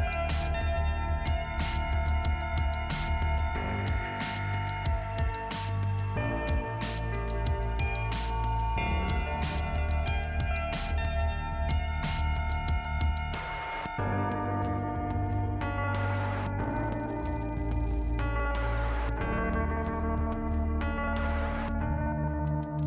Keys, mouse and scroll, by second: 0.5 click, 3.4 click, 3.5 click, 4.6 click, 8.7 click, 8.8 click, 9.9 click, 10.1 click, 11.0 click, 11.2 click, 12.0 click, 12.2 click, 13.2 click, 13.3 click, 14.9 click, 15.0 click, 16.8 right click, 16.9 right click, 20.2-20.6 scroll down 1, 22.6 click.